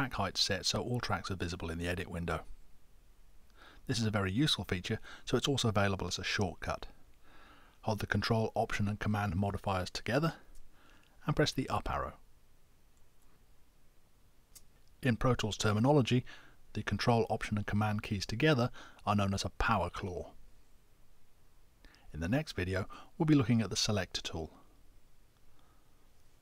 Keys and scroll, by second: 12.9 ctrl+alt+super+Up.